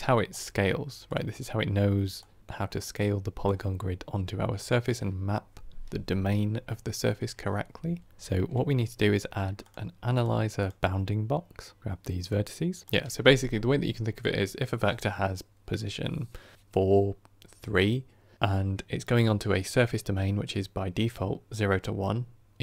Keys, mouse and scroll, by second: 0.2 click, 1.0 click, 3.8-22.6 drag.